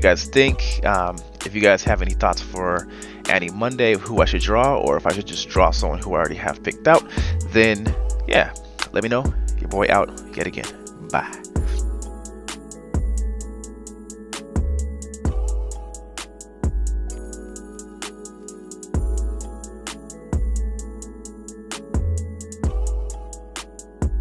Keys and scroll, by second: 19.5 scroll, 21.0-24.2 typing.